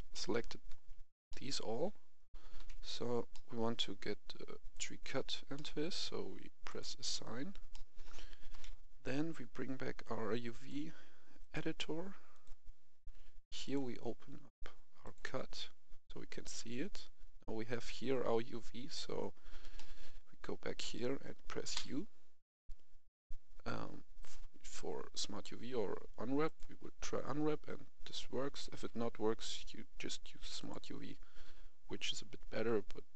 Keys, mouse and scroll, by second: 0.0 middle click, 1.2 shift+middle click, 1.8 scroll down 1, 2.5 KP_1, 3.2 middle click, 4.7 click, 5.4 middle click, 6.6 click, 7.6 middle click, 8.4 KP_1, 9.9 click, 15.5 scroll down 1, 16.6-17.3 scroll up 1, 19.7-20.8 middle drag, 21.7 u, 26.4 click, 28.7 u, 29.3 click, 32.5 u.